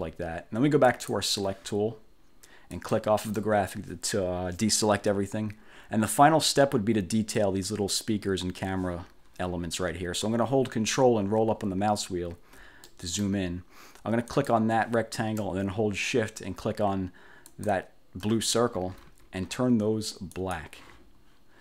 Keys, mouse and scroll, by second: 1.0 click, 2.8 click, 3.5-5.1 drag, 11.0-12.0 ctrl+scroll up 3, 12.5 ctrl+scroll up 1, 13.0 ctrl+click, 14.5 click, 17.6 shift+click, 20.5 click.